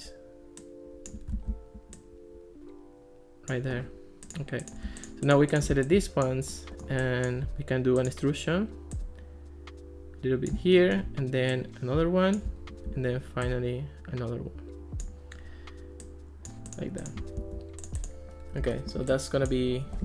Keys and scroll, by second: 1.5 super+z, 17.4 alt+r.